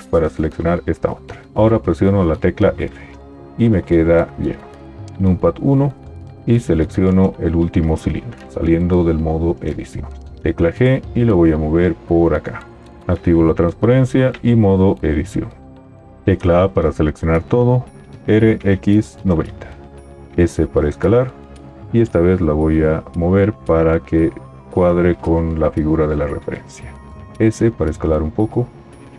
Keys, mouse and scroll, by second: 2.3 f, 5.1 KP_1, 8.5 Tab, 10.4 g, 13.0 alt+z, 14.7 Tab, 16.3 a, 18.2 r, 20.3 s, 22.3 g, 27.3 s.